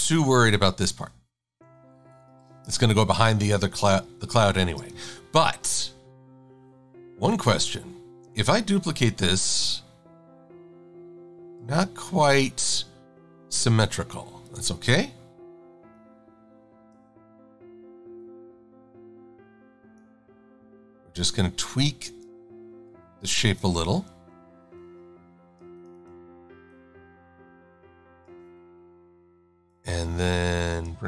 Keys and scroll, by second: 2.2 super+-, 2.7 shift+super+a, 24.1 Delete.